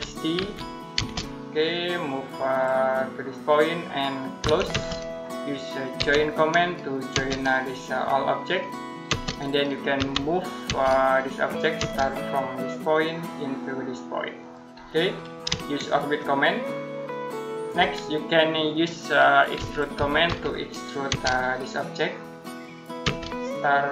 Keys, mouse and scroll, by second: 0.0-0.8 typing, 3.3 click, 4.2 c, 5.8 j, 7.0 space, 7.5 click, 8.9 space, 9.8 m, 10.5 space, 11.0 click, 12.7 click, 15.7 shift+middle click, 19.2-20.9 typing, 22.3 click, 22.9 space.